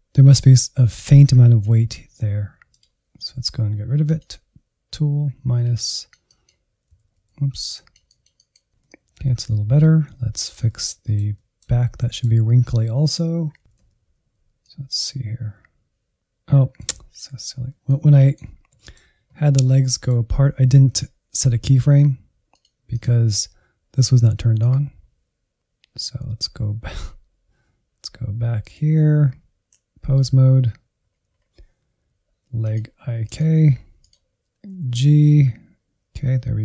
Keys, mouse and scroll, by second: 0.4-2.1 drag, 2.1 Insert, 2.3 click, 3.1 ctrl+z, 3.2 ctrl+z, 3.4-5.7 drag, 5.7 middle click, 6.2 Insert, 7.2 click, 7.9 Insert, 8.1 middle click, 8.5-8.8 scroll down 3, 8.8-11.3 middle drag, 11.3-12.1 Right, 12.5-16.9 drag, 17.0 Insert, 17.6 middle click, 18.5 scroll down 1, 18.8-22.5 middle drag, 22.5-24.8 drag, 27.6-29.6 drag, 29.6 ctrl+Tab, 30.2-31.1 scroll down 5, 31.3 click, 32.2 Up, 32.5 Up, 32.7 scroll down 1, 32.9 middle click, 33.5-34.3 Right, 34.9 g.